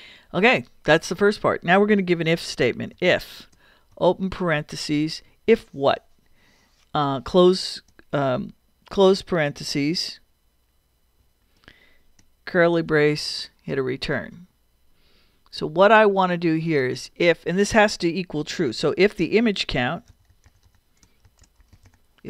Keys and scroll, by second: 2.7-3.6 typing, 11.2 shift+0, 12.5 shift+[, 13.1 shift+Return, 13.8 Return, 19.7-22.1 typing.